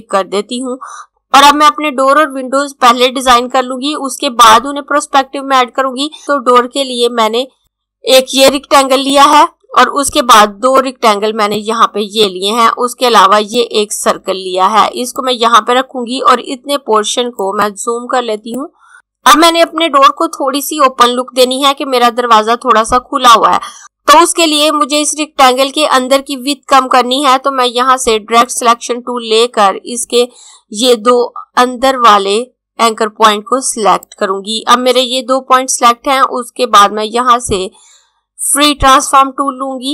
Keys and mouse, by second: 6.2 click, 28.3 click, 38.3 click.